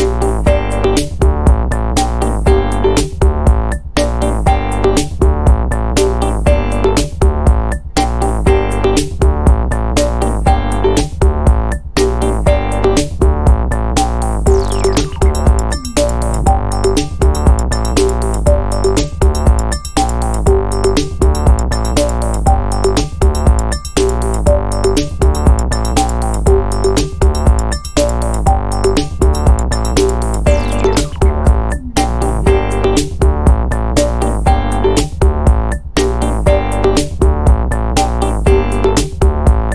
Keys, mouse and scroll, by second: 0.2-1.7 drag, 1.9 click, 2.8 click, 3.3 click, 3.7-7.1 drag, 8.9 click, 10.7 click, 14.2 click, 15.1 2, 15.6 5, 16.8 click, 17.5-18.5 typing, 19.3 click, 20.3 2, 20.7 0, 21.8 click, 23.3 click, 24.7-26.5 drag, 27.3-29.0 drag, 30.3 click, 31.5-37.4 drag, 38.1 click, 39.3 5.